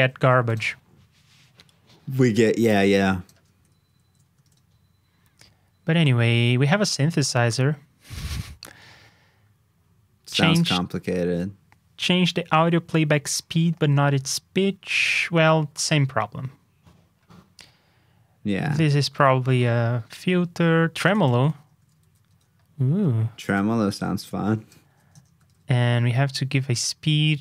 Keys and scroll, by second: 3.8 alt+shift+Down, 4.4 super+Tab, 22.0 super+c, 22.2 super+Tab, 24.8 super+v, 25.4 super+Tab.